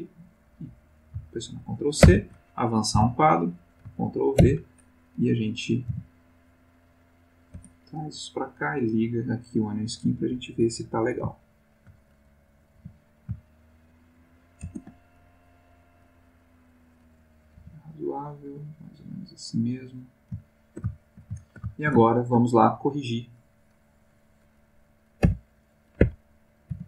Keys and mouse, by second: 2.0 ctrl+c, 2.9 Right, 4.4 ctrl+v, 5.9 g, 7.6 space, 8.7 click, 11.4-12.0 ctrl+middle drag, 12.7 g, 13.2 shift+g, 14.6 shift+space, 15.3 shift+click, 17.2 click, 17.6 g, 18.8 click, 19.6 click, 20.4-22.4 ctrl+middle drag, 22.7 ctrl+shift+click, 25.2 b, 26.0 Escape, 26.7 b.